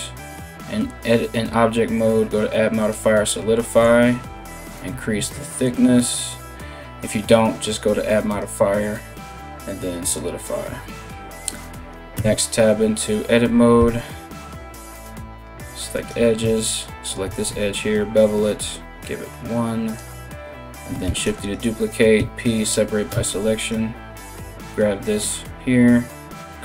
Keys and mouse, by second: 7.9-19.7 drag, 11.8 Tab, 13.4 2, 13.4 q, 14.9 2, 15.5 alt+middle click, 15.5 alt+right click, 16.8 ctrl+b, 19.7-23.2 middle drag, 20.7 shift+d, 21.8 p, 22.7 Tab, 23.2 right click, 23.3-26.3 middle drag, 26.3-26.6 shift+drag.